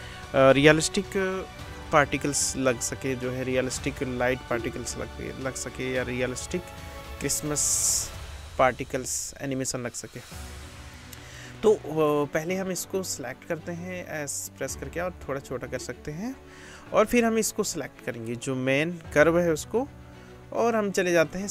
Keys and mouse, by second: 11.5-13.7 drag, 13.7 s, 13.9-16.7 drag, 17.0-21.5 drag.